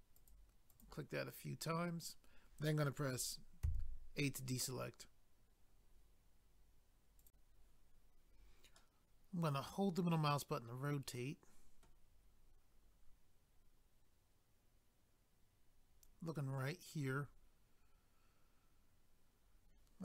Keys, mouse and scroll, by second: 0.7 click, 0.8 click, 3.6 a, 7.2 click, 8.8 middle click, 17.2 scroll down 1, 18.3 scroll up 1.